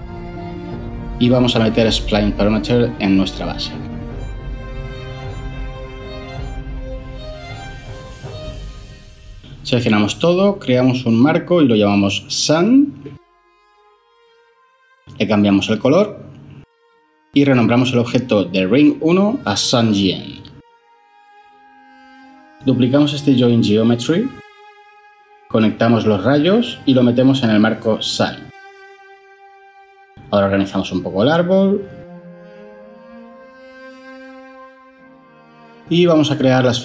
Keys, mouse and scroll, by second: 11.6 ctrl+j, 12.2 F2, 13.2-13.9 typing, 14.4 Return, 17.4-19.4 typing, 19.7 Return, 23.8 shift+d, 35.9-36.6 drag.